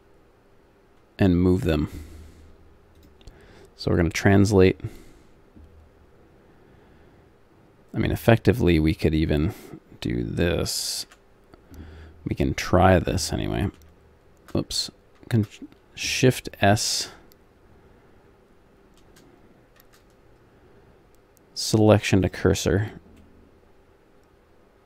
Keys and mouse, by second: 3.0-5.3 drag, 8.7-11.0 drag, 11.0 a, 12.3-13.9 drag, 13.9 shift+a, 15.2 shift+s, 19.8 shift+s, 23.2-24.8 middle drag.